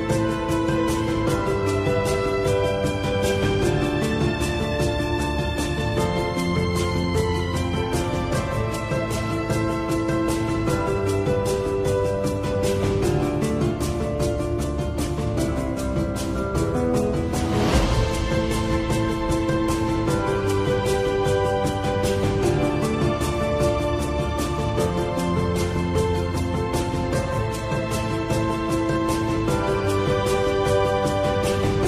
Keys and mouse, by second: 0.1-0.9 drag, 1.3-3.4 drag, 5.3 click, 5.8 click, 8.1 click, 10.8 click, 11.6 Tab, 11.9-13.8 middle drag, 14.3-15.6 middle drag, 15.9-19.6 middle drag, 19.9-20.5 middle drag, 21.2 Tab, 23.8 shift+d, 25.7 p, 27.3 Tab, 28.2-28.7 drag.